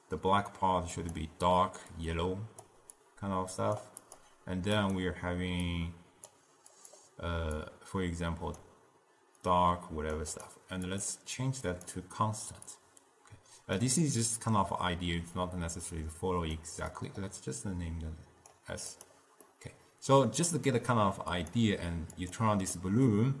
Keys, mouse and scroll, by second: 4.9-7.0 drag, 11.0-17.2 drag, 19.0 click, 19.6-21.5 middle drag, 21.5 drag, 22.4 click, 22.8-23.4 middle drag.